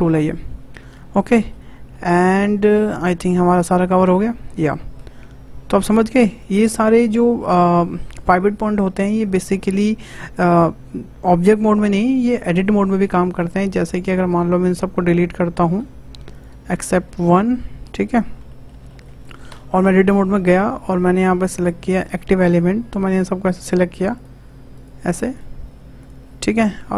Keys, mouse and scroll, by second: 1.0-1.3 scroll down 2, 1.3 middle click, 1.7-2.1 scroll up 2, 2.1 shift+middle click, 2.9-6.0 drag, 13.4 click, 15.9 Delete, 16.3 click, 16.5 Delete, 16.7 scroll up 3, 17.2 shift+middle click, 17.7 scroll down 1, 17.8 shift+middle drag, 18.1-18.5 scroll up 2, 18.5-19.2 shift+middle drag, 19.2 click, 19.5 Tab, 20.4-21.1 shift+middle drag, 21.1-23.2 drag, 23.6 shift+click, 24.1 shift+click, 24.7 shift+click, 25.3 shift+click, 26.0 shift+click, 26.4 shift+click.